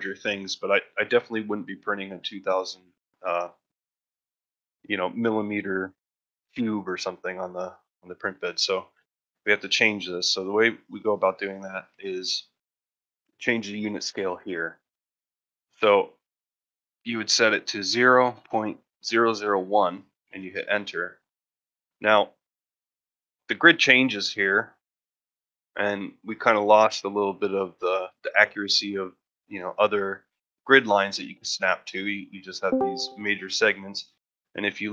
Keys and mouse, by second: 15.6-21.0 drag, 21.6-22.1 middle drag, 22.5 shift+middle drag, 22.9-24.4 ctrl+middle drag, 24.8 shift+middle drag, 30.0 shift+middle drag, 31.7 ctrl+middle drag, 33.6 shift+middle drag.